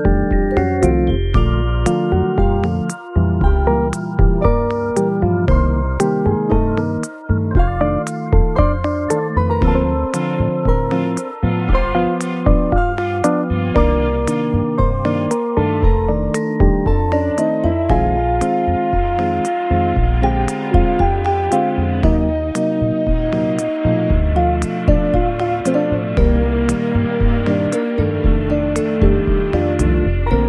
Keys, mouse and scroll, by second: 0.3 middle click, 0.8 m, 1.6 a, 1.7 s, 3.1 s, 3.3 z, 5.5 s, 8.3 scroll up 1, 8.6 middle click, 9.7 m, 9.7 s, 12.1 s, 13.7 z, 14.3 double click, 14.4 middle click, 15.3 alt+z, 15.6 alt+middle click, 16.2 alt+z, 17.1 Tab, 18.4 g, 19.1 z, 19.4 s, 21.0 middle click, 23.6 KP_1, 23.6-24.5 scroll up 4, 24.6 g, 26.2 r, 30.1 y.